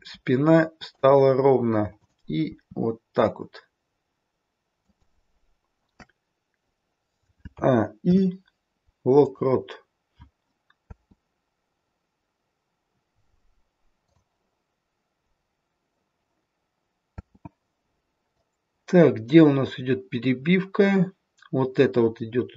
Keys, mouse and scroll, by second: 2.0 click, 2.5 r, 7.5 a, 7.9 i, 10.7 space, 14.1 click, 18.3 click, 18.3 space.